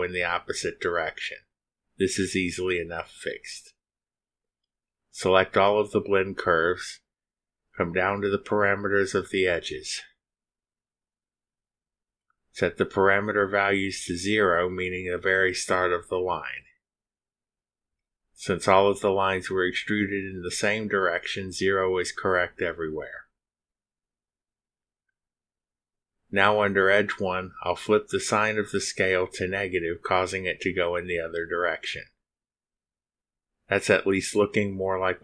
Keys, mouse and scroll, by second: 0.4 space, 3.4 click, 5.6 click, 6.5 shift+click, 16.3 click, 18.5 0, 21.1 click, 22.8 0, 30.0 click, 31.5 -, 31.8 2.